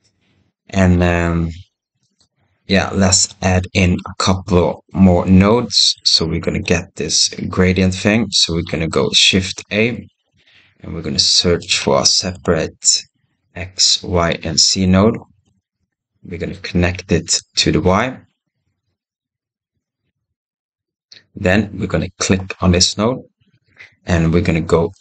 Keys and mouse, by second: 3.3 click, 3.4 right click, 3.5 middle click, 3.6 right click, 15.9 click, 18.0-18.6 right drag, 21.0 click.